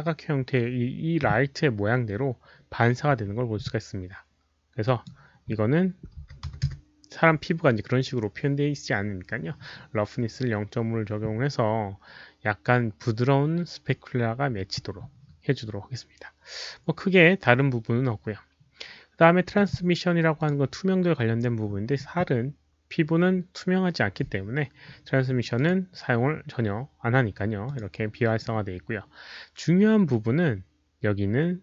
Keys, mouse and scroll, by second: 0.4 Return, 0.4 click, 0.4 KP_0, 4.5 Return, 4.8 click, 6.2 KP_Decimal, 6.4 KP_5, 6.6 Return, 7.0 click, 15.7 Return, 15.7 KP_5, 15.7 KP_Decimal, 16.4 Return, 16.4 KP_5, 16.4 KP_Decimal, 19.5 click, 20.3 click, 23.1 click, 25.6 click, 27.6 click, 29.7 scroll down 1, 30.0 click.